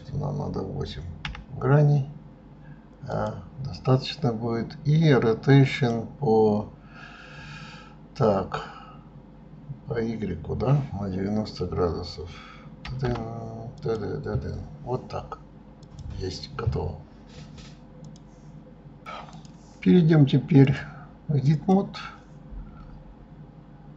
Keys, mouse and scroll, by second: 5.7-8.7 drag, 15.8 click, 19.5 middle click, 20.7-23.7 drag.